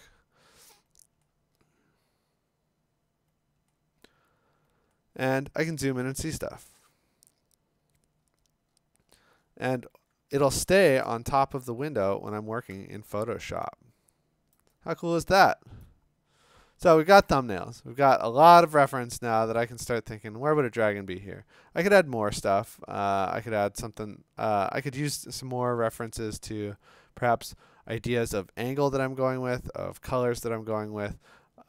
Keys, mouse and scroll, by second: 1.3-2.0 scroll, 3.7-4.2 scroll, 4.9 scroll, 7.8-8.3 scroll, 8.3-10.3 scroll down 19, 10.3-11.0 scroll, 11.7-14.4 click, 12.1-12.7 scroll, 14.5 click, 14.7 click, 14.8 click, 14.8-15.2 click, 14.9 click, 15.0 click, 15.1 click, 15.3 click, 15.4 click, 15.5 click, 15.5 click, 15.6 click, 15.8 click, 17.4 scroll, 18.2-18.9 scroll, 19.4-20.3 scroll, 20.6 scroll down 10, 20.7 scroll, 21.4-22.0 scroll, 22.7 scroll, 23.4 scroll, 24.1 scroll, 24.8 scroll, 25.6 scroll, 26.7-27.3 scroll, 28.9-29.2 scroll, 31.5 scroll.